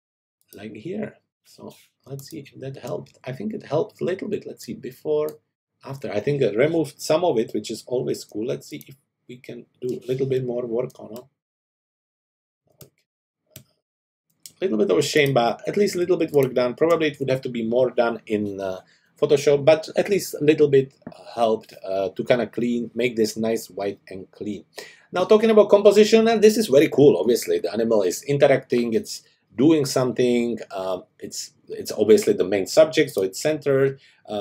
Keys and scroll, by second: 2.1 space, 8.3 space, 16.1 space.